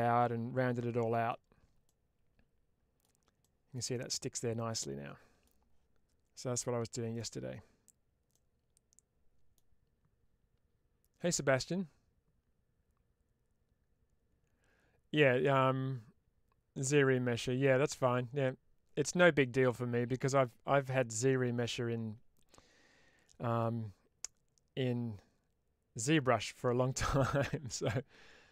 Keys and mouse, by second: 1.7-2.9 middle drag, 3.8-5.3 middle drag, 7.0 click, 8.2-9.4 middle drag.